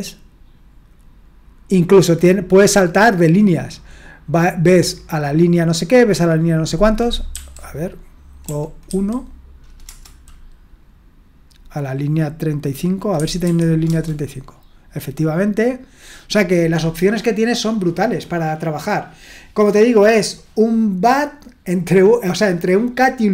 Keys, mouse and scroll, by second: 7.3 typing, 8.5-8.9 typing, 9.8 Return, 13.1 typing, 13.9 Return.